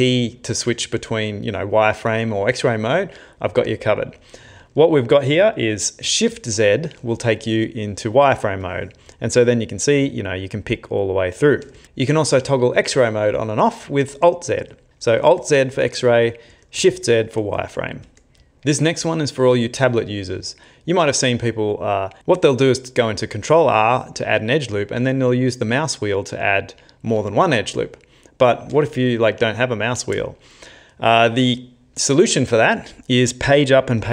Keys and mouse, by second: 6.3 shift+z, 8.6 click, 9.8 click, 11.8 shift+z, 14.1-14.9 alt+z, 15.3 alt+z, 15.8 alt+z, 16.1 alt+z, 16.5 alt+z, 16.9 alt+z, 17.6 shift+z, 18.0 shift+z.